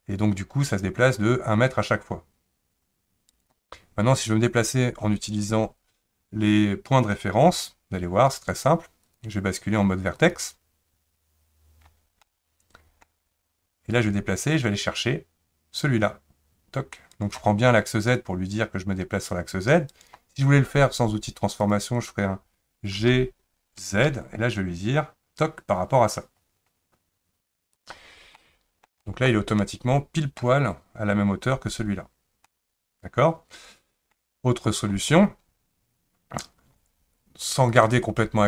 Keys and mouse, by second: 1.3-3.3 drag, 9.0-11.9 drag, 12.3-14.1 middle drag, 14.1-17.1 drag, 18.1 click, 18.3-19.9 drag, 21.6 click, 23.0 g, 28.4 middle click, 29.0 shift+middle click, 29.6 middle click, 32.5-34.1 middle drag, 37.7 click.